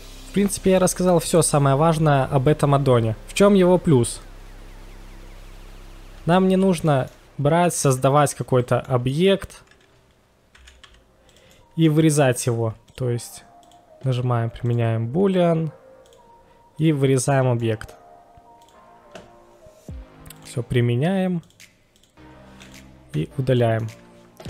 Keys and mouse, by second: 4.4 drag, 4.5 middle drag, 4.9 shift+a, 6.2 g, 6.2 z, 6.5 click, 6.9 middle click, 8.7 click, 8.7 x, 8.8-9.1 middle drag, 10.5 s, 10.5 x, 11.3 drag, 11.3 y, 11.5-11.9 middle drag, 12.8 click, 13.7-14.8 drag, 17.6-17.9 middle drag, 20.4 click, 21.4-22.1 drag, 22.6 click, 23.6 middle click.